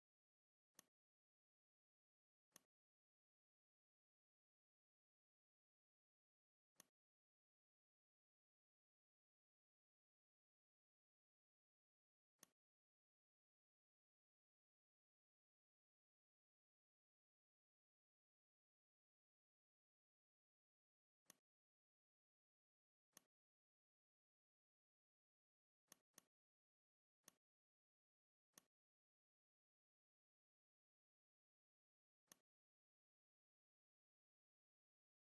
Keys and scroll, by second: 28.3 space, 30.2 m.